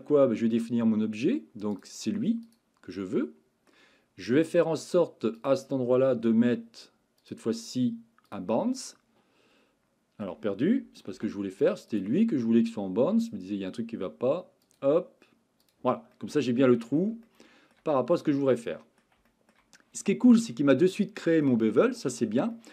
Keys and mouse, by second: 1.8 click, 3.0-3.7 middle drag, 7.2-8.4 drag, 8.8-10.2 middle drag, 11.2 ctrl+z, 11.9 click, 14.7-15.7 drag, 16.1 middle click, 17.3-17.8 shift+middle drag, 18.5-19.0 middle drag, 19.3 shift+middle drag, 20.8-21.5 middle drag, 22.5-22.7 shift+middle drag.